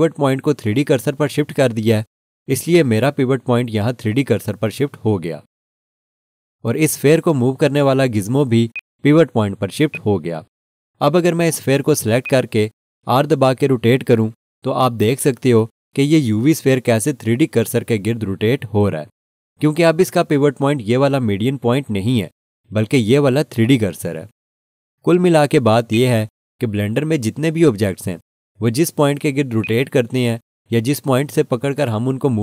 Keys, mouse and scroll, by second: 0.2 r, 8.7 right click, 9.9 right click, 10.1 click, 25.9 right click, 29.6 click.